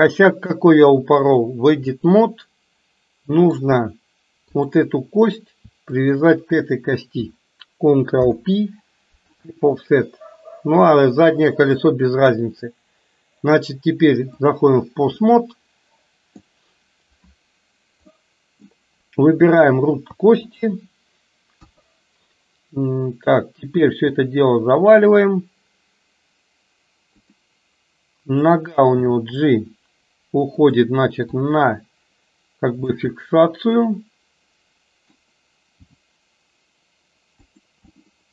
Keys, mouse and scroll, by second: 0.0-1.5 drag, 2.0-3.6 middle drag, 5.9 shift+click, 8.1 ctrl+p, 12.1-14.8 drag, 15.4-16.6 middle drag, 18.1 middle click, 19.5 click, 20.5 shift+click, 21.6 KP_1, 24.0 r, 28.4 click, 29.1 g, 31.4 r, 33.1-35.3 middle drag, 36.0 g, 38.0-38.3 middle drag.